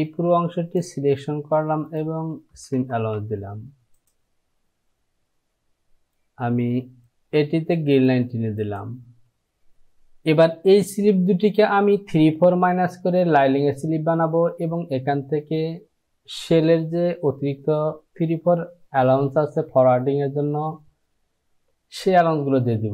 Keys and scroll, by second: 2.8 Down.